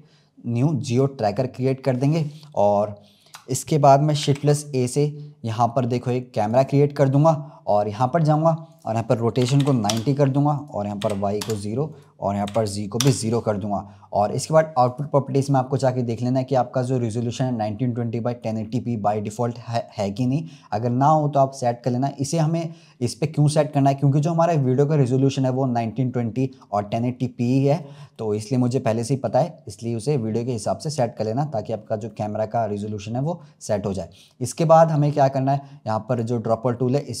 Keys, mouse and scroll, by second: 0.8-3.8 drag, 4.1 shift+a, 8.6-13.6 drag, 13.6-14.8 scroll up 1, 14.8 click, 28.1-31.1 middle drag, 31.4-32.0 scroll up 4, 32.0-35.1 middle drag, 36.0 click.